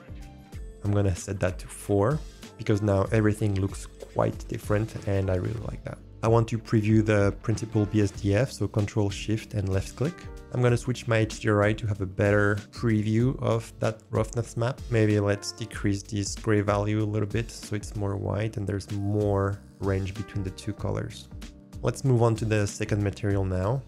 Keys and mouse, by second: 0.0-1.8 drag, 9.7 ctrl+shift+click, 12.2-14.8 drag, 18.2 click, 18.3 middle click, 19.8 click, 20.0 middle click, 20.0 click, 20.0 middle click, 20.2 click, 20.2 middle click, 23.3 drag, 23.5 middle click.